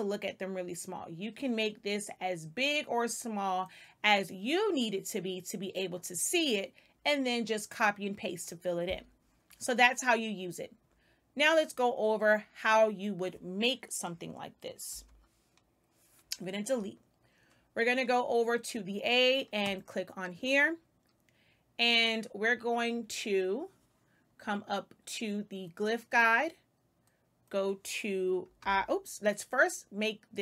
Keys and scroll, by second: 14.8 Delete, 28.5 i.